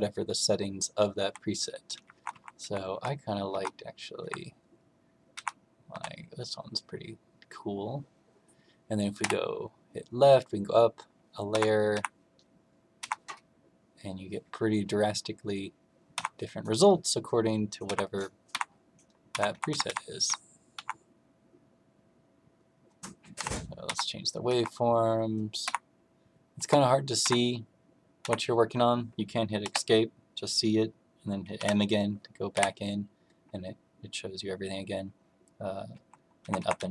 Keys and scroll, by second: 0.1 Down, 1.2 Down, 1.9 Up, 2.1 Up, 2.2 Up, 2.5 Up, 2.9 Up, 3.5 Up, 4.1 Up, 5.3 Up, 5.8 Down, 9.1 Left, 11.4 Up, 11.9 Up, 12.9 Up, 16.1 Up, 17.8 Up, 18.4 Up, 19.3 Up, 19.5 Up, 19.6 Up, 19.8 Up, 20.7 Up, 23.3 Left, 23.8 Up, 24.4 Up, 25.6 Up, 26.5 Up, 27.2 Up, 28.2 Up, 29.6 Escape, 31.5 m, 32.5 Right, 35.9 Down, 36.4 Up, 36.5 Up, 36.7 Up.